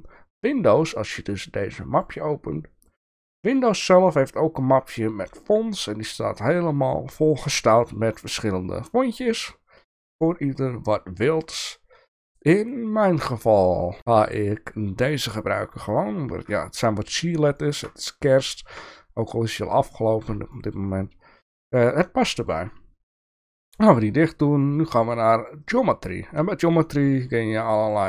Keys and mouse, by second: 17.6 shift+middle drag, 18.5 shift+middle drag, 19.7-20.3 middle drag, 20.7 shift+middle click, 22.4 shift+middle click, 27.7 click, 27.8 click, 28.0 click.